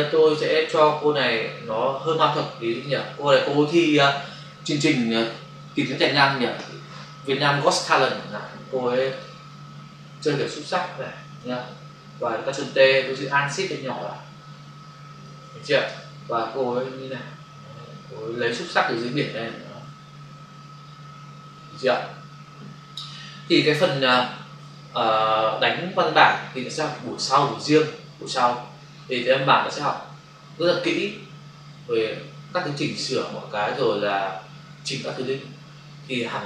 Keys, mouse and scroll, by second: 0.7 click, 0.8 click, 1.1 click, 1.3 double click, 2.6 ctrl+click, 2.7 ctrl+click, 9.1 ctrl+click, 9.5 click, 13.2 ctrl+t, 15.9 Return, 16.4 click, 19.2 Up, 20.6 Left.